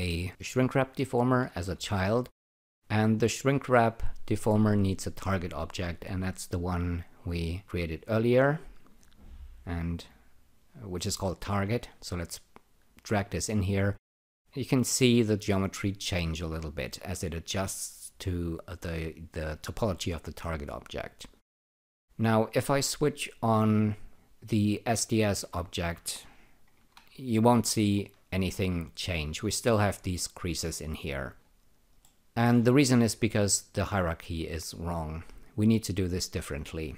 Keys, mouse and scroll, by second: 4.2 click, 7.3 click, 24.1 click, 25.1 alt+click, 26.7 ctrl+r, 32.0 alt+middle click.